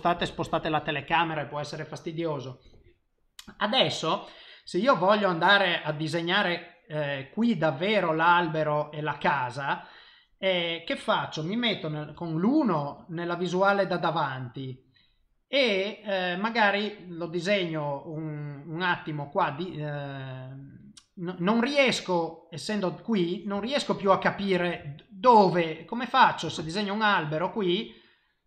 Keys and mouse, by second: 12.1 KP_1, 24.1 ctrl+middle click, 24.8 shift+middle click, 26.7 click, 27.8 click.